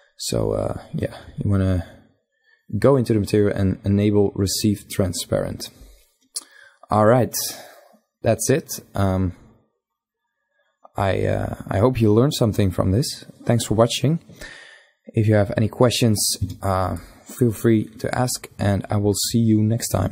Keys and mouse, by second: 2.4 click, 14.7 a.